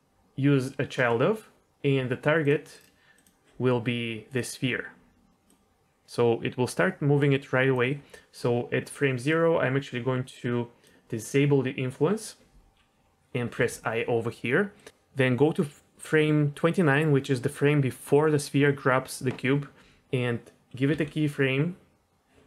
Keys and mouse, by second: 2.4 click, 3.1 click, 5.4-7.7 drag, 9.4-10.9 drag, 13.5 i, 14.7-16.7 drag, 20.9 i.